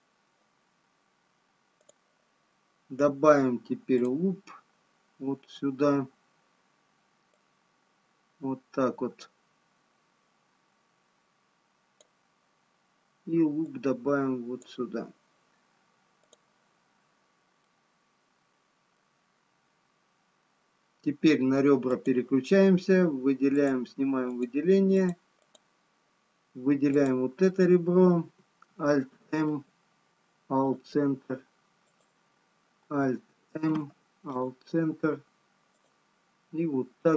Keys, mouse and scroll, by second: 4.1 click, 14.3 click, 17.4 click, 18.0 middle click, 20.1 scroll down 1, 22.2 click, 23.7 click, 24.5 click, 30.0 alt+m, 30.0 click, 32.8 click, 34.3 alt+m, 36.0 click.